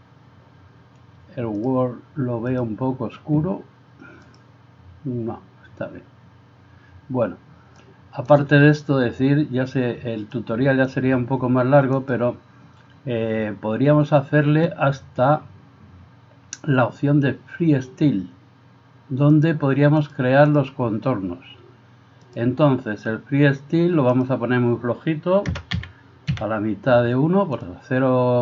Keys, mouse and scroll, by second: 1.6 drag, 4.2 click, 7.8-12.2 drag, 19.4-20.6 drag, 22.4-27.7 drag.